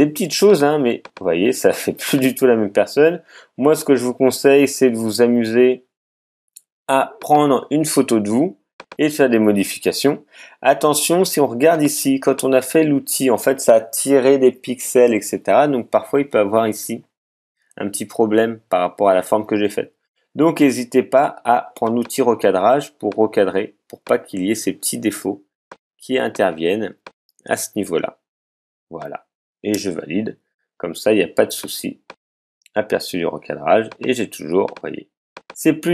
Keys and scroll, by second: 29.7 alt+Return.